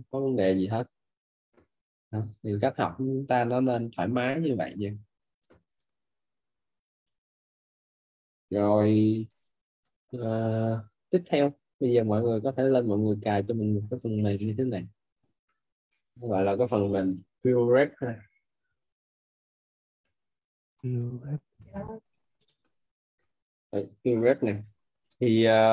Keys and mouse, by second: 14.7 click, 19.8 p, 21.2 u, 21.6 f.